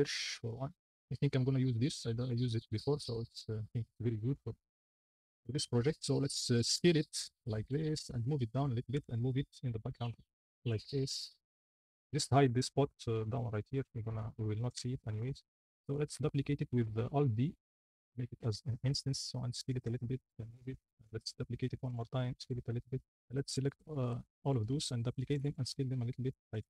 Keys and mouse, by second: 2.9 click, 4.3 click, 4.6 shift+middle drag, 5.7 middle click, 6.8 s, 7.6 click, 8.0 g, 8.0 z, 8.8 g, 10.1 y, 10.5 g, 10.6 z, 12.0 click, 14.6 g, 14.7 z, 17.1 alt+d, 18.4 r, 18.4 z, 19.6 s, 19.7 g, 20.4 z, 20.9 alt+d, 22.0 s, 23.3 shift+middle drag, 23.8 middle drag, 24.6 alt+d, 25.4 s, 26.5 g.